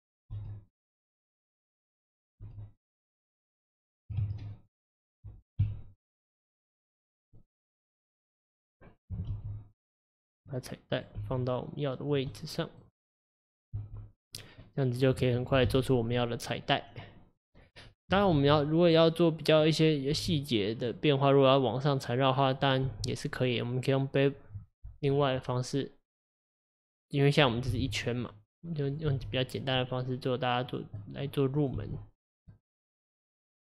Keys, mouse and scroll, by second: 0.4 s, 1.5 middle click, 2.1 click, 2.4 s, 4.2 ctrl+z, 4.6-5.7 middle drag, 5.7 KP_3, 7.4 middle click, 8.2 click, 8.5 middle click, 9.3 g, 11.0 click, 11.2 g, 12.3-13.6 middle drag, 13.6 click, 13.8 g, 14.7 middle click, 15.1-15.7 scroll down 1, 15.7 KP_1, 16.5-17.4 scroll up 1, 17.4 click, 18.4 g, 19.5 click, 20.2 g, 22.6 click, 22.9 g, 25.2-27.4 middle drag, 27.4 click, 27.7 g, 28.9 click, 29.1 g, 29.8 middle click, 30.7 click, 31.0 middle click, 31.6 click, 31.8 g, 32.5 middle click, 33.4 click.